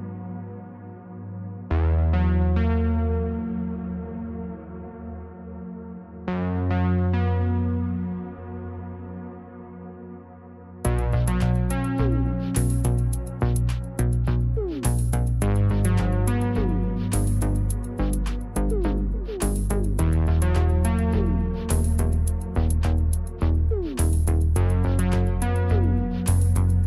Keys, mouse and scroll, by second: 3.4 space, 6.2 space, 9.5 space, 13.7 space, 16.7 space, 18.8 space, 19.7 space, 23.3 space.